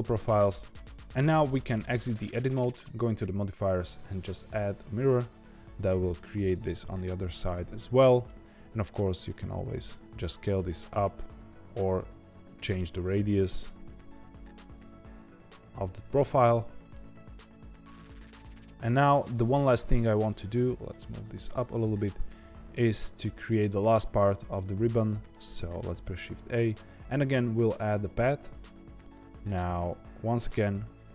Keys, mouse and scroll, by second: 0.7 Tab, 1.7 Tab, 3.0 click, 3.5-5.8 drag, 5.8-8.8 middle drag, 8.8 s, 11.3 Tab, 11.6 a, 11.9 s, 13.1 alt+s, 16.4-17.9 middle drag, 17.9 Tab, 19.3-20.5 middle drag, 20.5 g, 21.8-25.8 middle drag, 25.8 shift+a, 29.1-30.3 middle drag, 30.3 Tab.